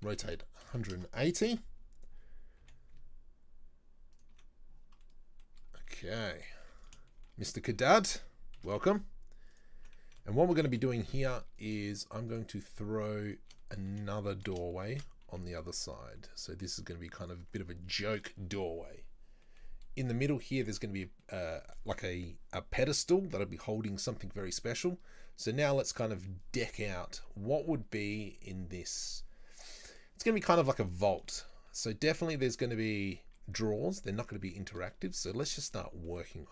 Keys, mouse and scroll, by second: 2.7 g, 5.1-5.6 middle drag, 5.6 scroll up 2, 5.9 middle click, 6.9 right click, 7.1 shift+middle click, 7.5-7.8 scroll up 2, 7.8 shift+middle click, 8.6 shift+d, 10.8 Delete, 11.6 right click, 12.3 shift+right click, 12.6 shift+right click, 13.3 shift+right click, 13.6-14.9 middle drag, 14.9 shift+d, 17.8 scroll down 1, 18.0-24.3 middle drag, 24.8-27.8 middle drag, 30.9 right click, 31.3-32.0 shift+middle drag, 32.0-32.3 scroll up 2, 32.3-35.5 middle drag, 35.5-35.8 scroll up 2, 35.8-36.4 middle drag, 36.4 scroll down 2.